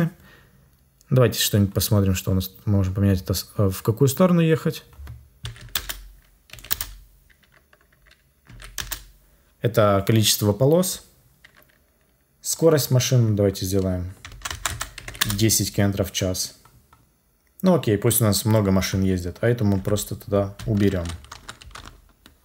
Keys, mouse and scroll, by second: 5.7 Return, 6.6 Return, 8.7 Return, 14.4 BackSpace, 15.1 Return, 19.7 Delete.